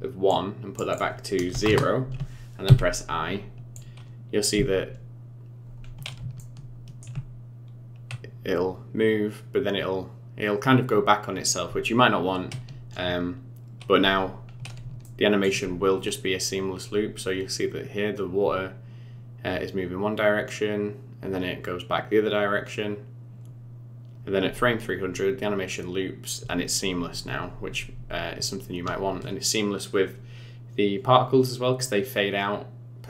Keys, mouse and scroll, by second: 0.3 click, 0.9 click, 2.6 i, 3.7 click, 4.5 space, 5.8 scroll up 4, 6.4 shift+middle click, 14.5 scroll down 4, 15.0 shift+middle click.